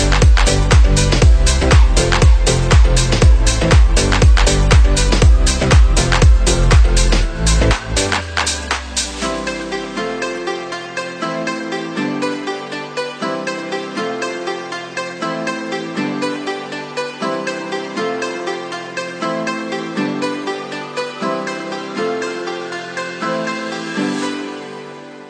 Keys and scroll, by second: 4.4 ctrl+[, 6.7 ctrl+c, 6.9 ctrl+v.